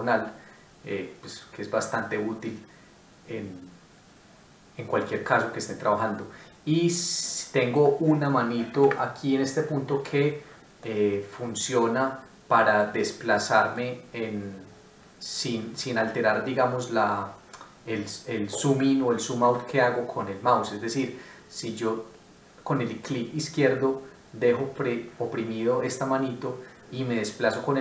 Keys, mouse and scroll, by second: 10.8 middle click, 20.0-20.5 scroll up 1, 20.6 scroll down 1.